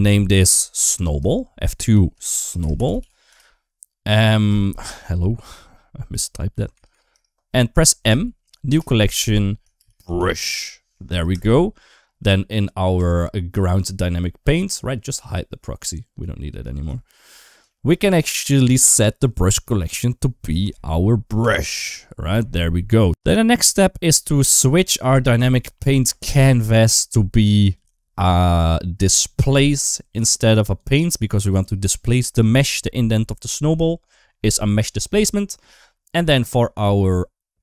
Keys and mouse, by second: 0.7 F2, 2.8 l, 4.4 F2, 6.7 BackSpace, 7.9 m, 12.8 click, 16.0 click, 16.8 shift+middle click, 17.5 shift+middle click, 19.5-21.4 drag, 27.6-29.4 drag, 30.7 click.